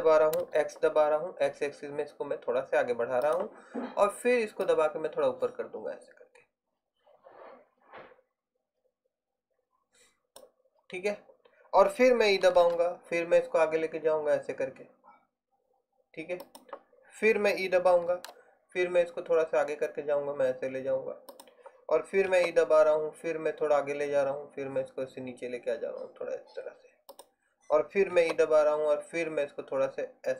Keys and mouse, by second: 2.4 click, 4.7 click, 6.5 click, 12.7 e, 18.2 e, 22.4 e, 28.2 e.